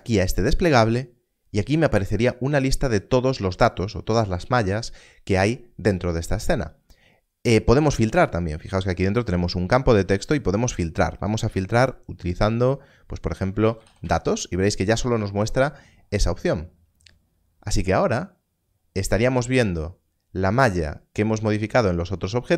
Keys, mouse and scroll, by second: 13.6 d, 13.8 t, 17.9 s.